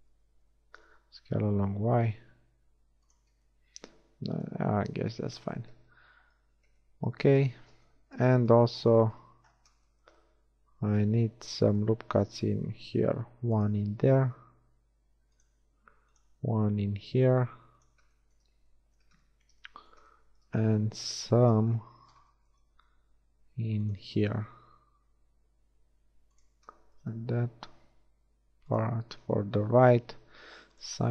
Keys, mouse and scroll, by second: 0.5 l, 1.4 s, 3.6 Tab, 8.2 Tab, 13.3 ctrl+r, 15.8 ctrl+r, 23.0 ctrl+r, 24.2-26.4 drag, 27.4 ctrl+shift+r.